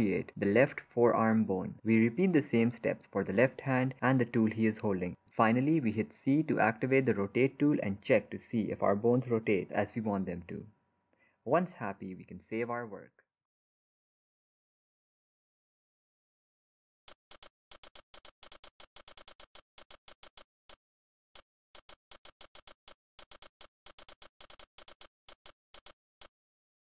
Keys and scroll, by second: 10.8 ctrl+z, 11.4 ctrl+z.